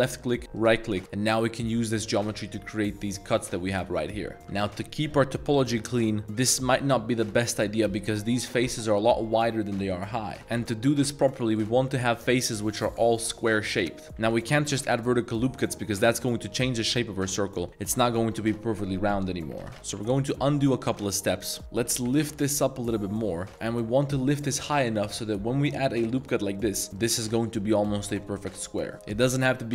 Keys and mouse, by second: 4.2 middle click, 4.4 ctrl+r, 5.6 ctrl+r, 6.8-7.2 middle drag, 7.5 3, 7.8 click, 8.5 shift+middle click, 9.2 middle click, 10.4 ctrl+r, 10.5 ctrl+z, 11.2 ctrl+r, 11.5 click, 12.0 ctrl+r, 12.2 click, 12.7 ctrl+r, 12.9 drag, 13.1 3, 13.2 click, 13.5 click, 14.0 middle click, 14.0 z, 14.2 ctrl+r, 14.4 click, 14.6 ctrl+r, 14.9 click, 15.1 middle click, 15.4 Tab, 15.5 middle click, 16.0 middle drag, 16.2 a, 16.4 a, 16.5 click, 16.7-17.0 middle drag, 17.3 middle drag, 17.6 middle click, 18.2 Tab, 19.6 ctrl+z, 19.9 ctrl+z, 20.4 ctrl+z, 21.2 Tab, 21.5 Tab, 21.7 g, 22.0 z, 23.5 click, 24.6 middle click, 25.0 ctrl+r, 26.2 click, 26.5 middle click, 26.9 3, 28.2 middle click.